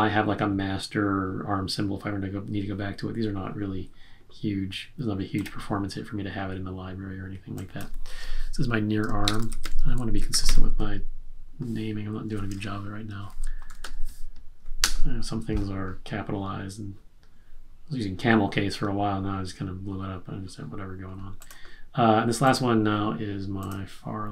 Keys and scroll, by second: 9.0-10.9 typing, 13.3-14.2 typing.